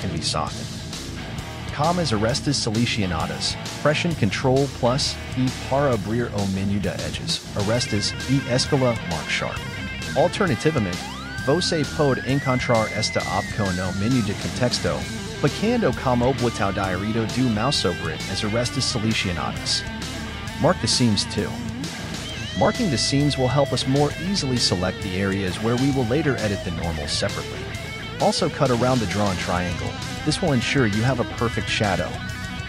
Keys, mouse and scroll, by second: 0.1 shift+middle click, 0.3-2.7 scroll up 9, 0.6 shift+middle click, 2.7 right click, 3.5 shift+right click, 4.0 shift+right click, 4.6 shift+right click, 5.0 shift+right click, 6.0 alt+right click, 7.2 alt+shift+right click, 8.2 alt+shift+right click, 8.9 alt+shift+right click, 9.7 alt+shift+right click, 10.2 shift+right click, 11.0 shift+right click, 11.3-11.8 scroll down 3, 11.8 shift+middle click, 12.1 shift+scroll down 1, 12.2-12.9 scroll up 4, 12.9 alt+shift+right click, 13.6 shift+right click, 14.1 shift+right click, 14.5 shift+middle click, 15.2 shift+right click, 15.6 shift+right click, 16.1 shift+right click, 16.7 shift+right click, 17.7 q, 20.4-21.4 scroll down 4, 21.4-22.6 shift+middle drag, 22.6 click, 23.1-25.0 typing, 24.9 click, 24.9 scroll up 2, 26.5 k, 27.0 shift+middle click, 27.2 k, 27.5 scroll down 2, 27.6 shift+middle click, 27.7 k, 28.8 click, 28.8 shift+middle click, 28.9 scroll up 4, 29.1 alt+j, 29.2 alt+j, 29.3 scroll down 3, 29.5 click, 29.6 alt+j, 29.7 click, 29.8 alt+j, 29.9 alt+j, 30.1 shift+middle click, 30.2 scroll up 2, 30.4 alt+j, 30.5 alt+j, 30.6 scroll down 3, 30.7 click, 30.8 alt+j, 31.0 alt+j, 31.2 scroll down 1, 31.6-32.0 scroll up 3, 31.6 ctrl+z, 32.0 click, 32.1 alt+j, 32.5 click, 32.6 scroll down 2, 32.6 shift+middle click.